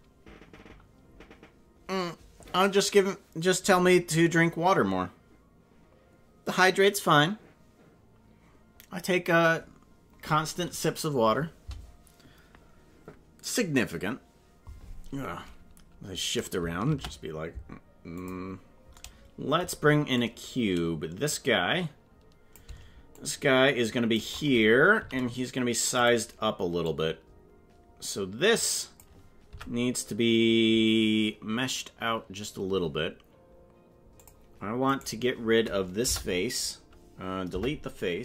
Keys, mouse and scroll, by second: 16.9 shift+a, 20.1 click, 21.7 click, 23.1-24.2 shift+drag, 24.9 s, 26.8-29.0 drag, 29.5 Tab, 34.2 click, 34.9 right click, 36.0 Delete, 37.5 Delete.